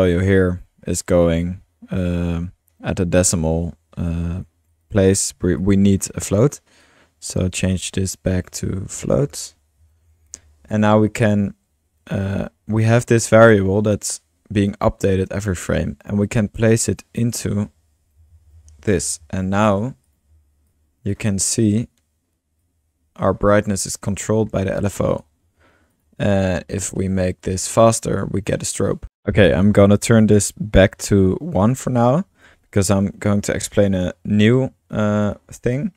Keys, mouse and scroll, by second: 4.4-5.5 drag, 5.3 middle click, 5.6-6.8 drag, 7.6 click, 8.5-10.9 typing, 13.4-13.9 drag, 13.9-15.1 middle drag, 16.7-18.0 drag, 17.9-19.2 typing, 20.2-22.0 drag, 22.6-23.7 drag, 24.1 drag, 24.5-24.8 middle drag, 24.8 drag, 25.1 drag, 25.9 click, 27.4-29.0 drag, 29.4-29.7 drag, 31.9 click, 32.5-34.4 typing, 34.9-35.8 drag, 35.8 middle click, 35.8 scroll.